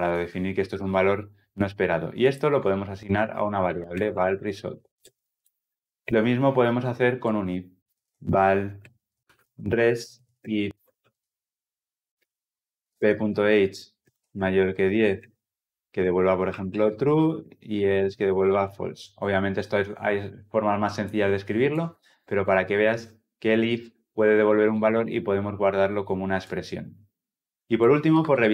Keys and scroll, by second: 13.5 Return.